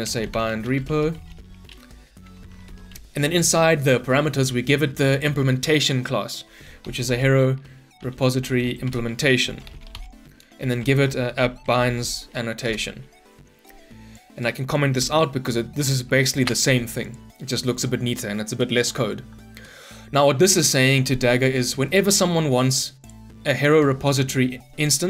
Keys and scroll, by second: 2.6 ctrl+shift+Return, 8.8 Return, 16.2 ctrl+/.